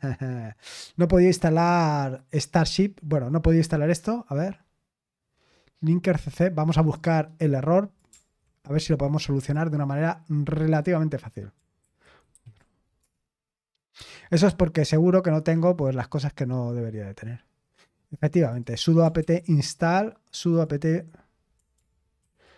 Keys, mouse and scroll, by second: 5.5-5.9 scroll up 1, 7.0-8.0 drag, 9.4 click, 10.7 click, 11.1 click, 11.8 ctrl+t, 12.3 ctrl+v, 13.0 Return, 14.6 click, 16.4-16.9 scroll down 1, 17.5-17.9 scroll down 1, 18.4 click, 19.2 ctrl+c, 20.5 click, 22.2 ctrl+shift+v.